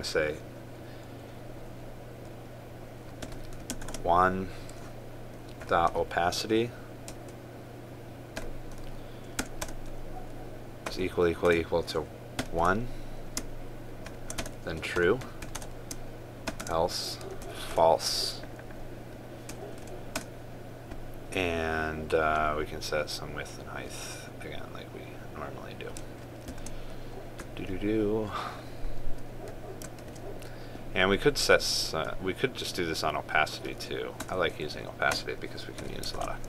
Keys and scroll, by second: 4.5 ctrl+space, 27.2 ctrl+c, 30.8 ctrl+v.